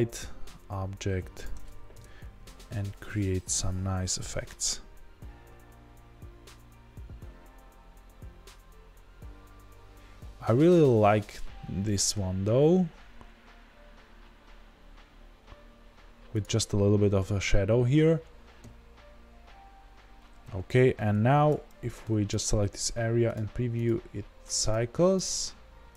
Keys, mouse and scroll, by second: 1.4 click, 1.9 KP_0, 3.0 r, 16.4 click, 22.3 ctrl+b, 24.7-25.9 drag.